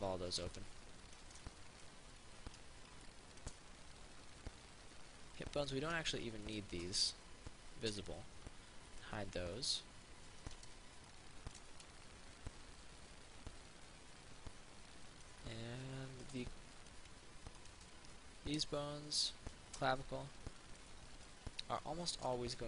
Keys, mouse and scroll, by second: 6.7 shift+right click, 8.1 m, 9.1 click, 15.5 alt+click, 17.9 right click, 22.5 r.